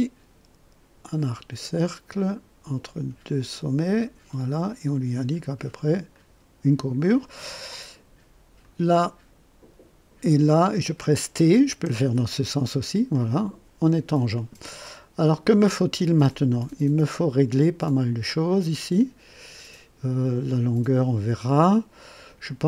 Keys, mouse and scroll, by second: 1.0 click, 3.9 click, 6.1 click, 7.0 right click, 8.6 click, 10.2 click, 11.7 t, 13.1 click, 18.5-20.2 drag.